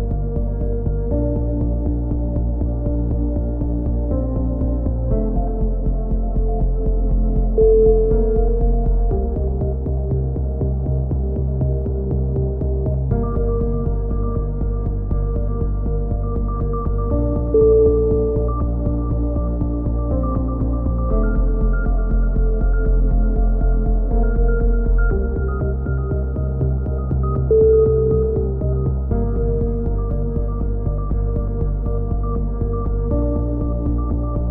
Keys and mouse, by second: 1.1 s, 3.9 a, 4.1 z, 4.9-5.9 drag, 6.5 KP_3, 6.8 z, 7.2-8.2 drag, 10.2 b, 11.3 e, 11.9-13.0 drag, 13.6 s, 14.6 middle click, 15.4-16.4 drag, 17.1-18.1 drag, 17.5 c, 18.9 click, 19.5 click, 22.4 click, 23.1 b, 24.4 b, 25.3 e, 26.1 click, 30.0 c, 31.9 right click, 32.2-33.2 drag.